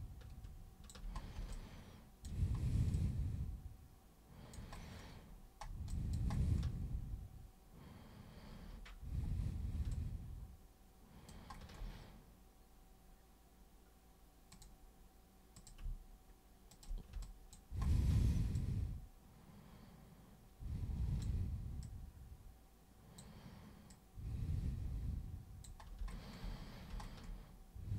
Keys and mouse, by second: 1.5 alt+super+click, 2.9-4.5 alt+super+drag, 5.8 alt+super+click, 9.9-11.3 alt+super+drag, 14.5 super+click, 15.6 super+click, 16.7 shift+click, 17.2 alt+click, 18.0 alt+click, 18.5-21.2 alt+drag, 21.8-23.2 drag, 23.9-25.6 drag.